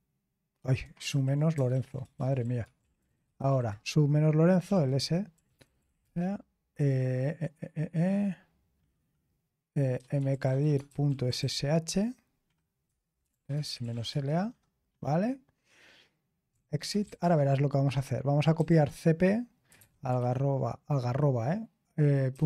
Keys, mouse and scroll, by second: 1.0 ctrl+p, 1.5-6.0 typing, 5.5 Return, 9.7-14.4 typing, 16.2-20.2 typing, 22.0-22.4 typing.